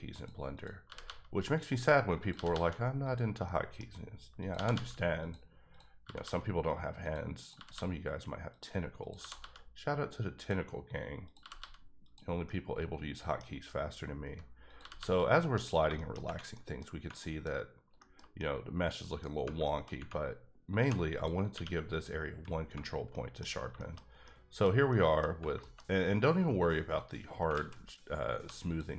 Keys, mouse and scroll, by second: 0.1 click, 0.5 click, 0.8 g, 1.0 g, 1.5 click, 2.2 click, 2.3 g, 2.5 g, 3.0 click, 3.4 middle click, 3.8 scroll down 2, 4.4 click, 4.5 g, 4.7 g, 5.2 click, 5.7 click, 6.0 g, 6.2 g, 7.0 click, 7.4 click, 7.5 g, 7.7 g, 8.5 click, 9.0 click, 9.2 g, 9.4 g, 10.4 click, 11.2 click, 11.4 g, 11.6 g, 12.0 click, 12.4 middle click, 13.5-14.7 scroll up 2, 14.7 click, 14.8 g, 15.0 g, 15.6 click, 15.9 shift+middle click, 16.2 Tab, 16.5 middle click, 17.2 middle click, 17.4-18.4 scroll down 4, 18.0 shift+middle click, 18.4 middle click, 19.6 shift+middle click, 20.0-20.8 scroll up 1, 20.8 2, 21.1 click, 21.5 q, 21.9 click, 22.5 scroll down 1, 22.6 Tab, 23.1 middle click, 23.5-24.2 scroll down 2, 23.7 shift+middle click, 24.2 middle click, 24.9 middle click, 25.2 Tab, 25.6 shift+middle click, 25.8-27.4 scroll up 3, 27.4 scroll up 1, 27.5 alt+z, 28.3 1, 28.6 click.